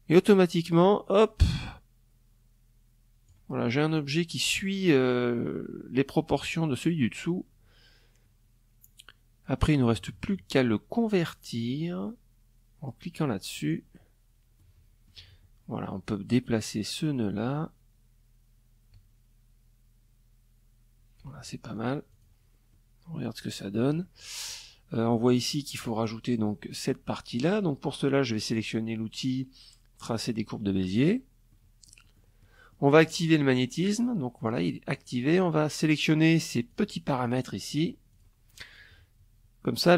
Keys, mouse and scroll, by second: 12.1 click, 13.1 click, 15.3-19.9 drag, 20.3 ctrl+click, 21.2 click, 22.5 click, 28.8 click, 29.3 click, 30.0 click, 32.9 click, 33.4 click, 35.2 click, 35.7 click, 36.3 click, 36.7 click, 37.1 middle click.